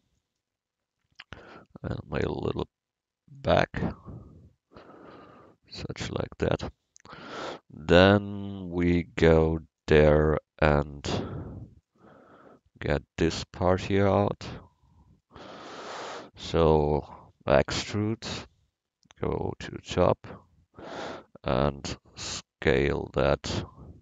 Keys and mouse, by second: 6.1 middle click, 15.9 KP_1, 17.6 e.